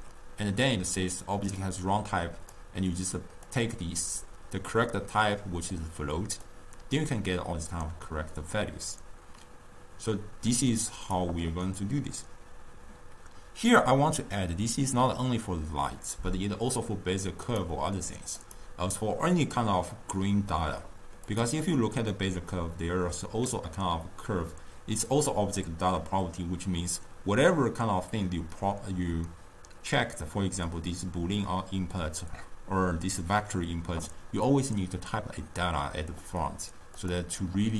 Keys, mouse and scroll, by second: 1.7 drag, 3.5-9.6 drag, 17.6 click, 18.4 click, 21.4 click, 37.1 click.